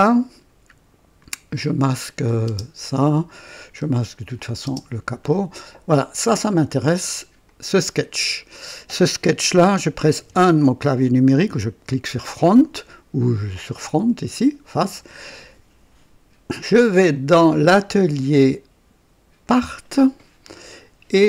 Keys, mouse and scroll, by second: 2.1 click, 2.4 typing, 3.7 scroll up 1, 4.3 click, 4.6 typing, 5.1 scroll down 1, 6.5 scroll down 1, 7.4 click, 10.1 typing, 10.7-11.4 right drag, 11.8-12.6 typing, 12.3 right click, 17.1 click, 19.4 click.